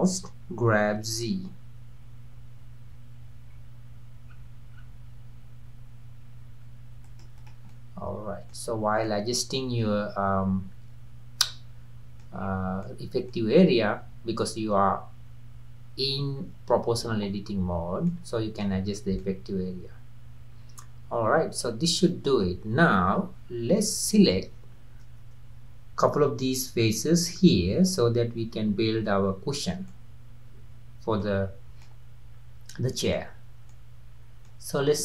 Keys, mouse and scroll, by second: 0.7 g, 7.4 click, 7.7-8.7 middle drag, 8.7-9.0 scroll up 1, 9.0-12.1 middle drag, 12.4-12.8 scroll up 3, 12.8-15.9 middle drag, 17.8 scroll down 1, 18.1 middle click, 18.9-19.2 scroll down 2, 19.2-22.2 middle drag, 23.5-24.5 scroll up 2, 24.5-25.2 scroll up 1, 25.2-25.8 scroll up 1, 25.8-26.5 scroll up 1, 29.6-29.9 scroll down 2, 29.9-31.4 middle drag, 31.4-31.8 scroll up 2, 31.8-35.0 middle drag.